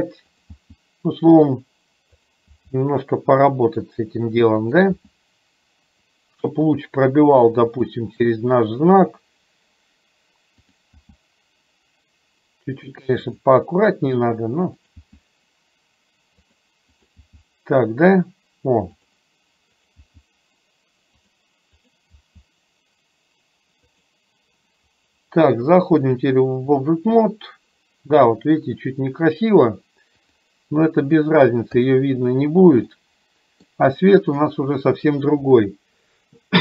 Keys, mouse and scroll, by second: 0.5 click, 0.6 g, 2.2 click, 2.6 g, 4.6 click, 5.1 g, 11.1 g, 14.8 click, 15.1 g, 17.1 click, 17.2 g, 20.0 click, 20.1 g, 22.3 g, 26.2 click, 32.0 click, 33.1-33.7 middle drag, 34.5-35.3 middle drag.